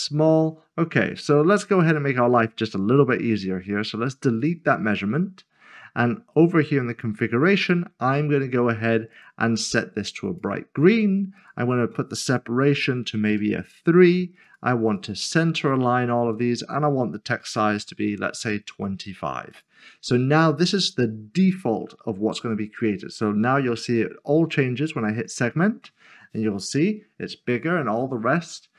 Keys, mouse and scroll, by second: 0.1-2.3 scroll down 1, 4.3 scroll down 1, 4.5 click, 6.9 click, 13.3 typing, 14.5 click, 14.9 double click, 15.7 click, 17.3 typing, 19.5 click, 25.3 click.